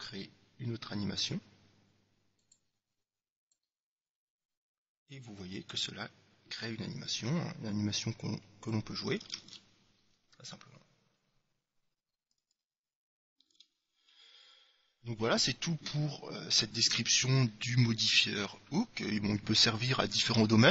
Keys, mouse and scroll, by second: 3.7-5.6 drag, 9.5 alt+a, 13.7 alt+a.